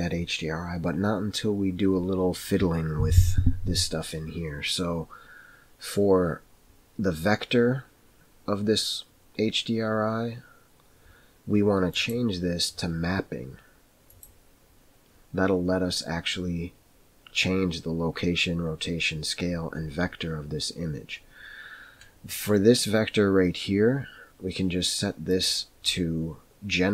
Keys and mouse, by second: 12.0-14.6 drag, 25.3-26.9 drag.